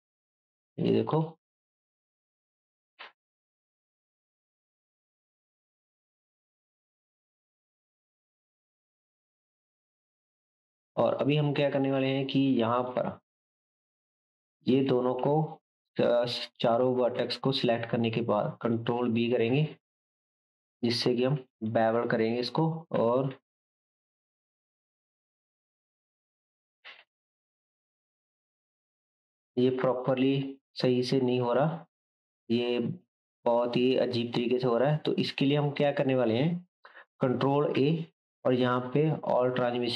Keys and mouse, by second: 1.8 click, 2.6 g, 7.8 g, 14.6 shift+click, 19.6-35.2 shift+drag, 22.9 ctrl+b, 30.7 ctrl+middle click, 31.1 ctrl+b, 31.3-35.2 middle drag, 35.2 Tab, 35.2-35.6 right drag, 35.6-39.9 shift+drag, 36.0-37.8 middle drag, 37.8 ctrl+a.